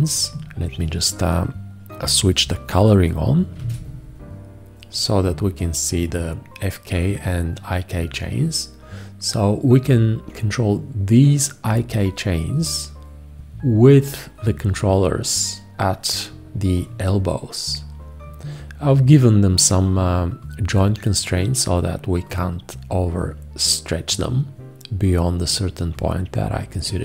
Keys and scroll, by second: 3.6 shift+g.